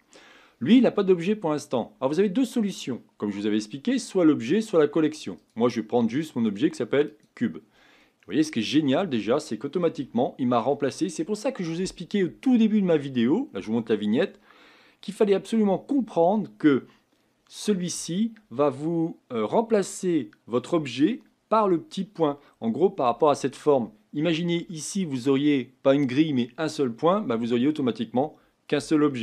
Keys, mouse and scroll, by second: 7.2 click, 8.0-9.4 middle drag, 9.4-10.0 scroll down 1, 10.0-23.5 shift+middle drag, 23.5 click, 24.2 Tab, 24.7-29.2 middle drag.